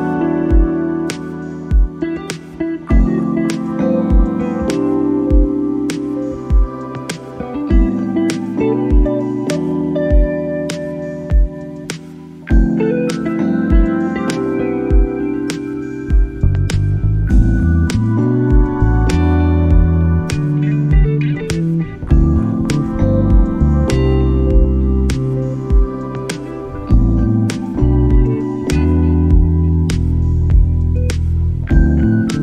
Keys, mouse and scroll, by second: 0.5 click, 1.9 click, 2.3 click, 2.4 click, 2.4 click, 2.9 middle click, 3.5 click, 4.1-5.1 drag, 5.3-9.0 drag, 9.1-10.0 middle drag, 10.6-12.1 drag, 12.8 click, 13.0 click, 15.1 click, 15.6 click, 19.6 middle drag, 20.0 middle drag, 20.5 middle drag, 21.5 click, 24.5 click, 26.1-27.2 drag, 27.4-28.5 drag, 29.0 click, 29.1 click, 30.6 click, 31.9 click, 32.0 click.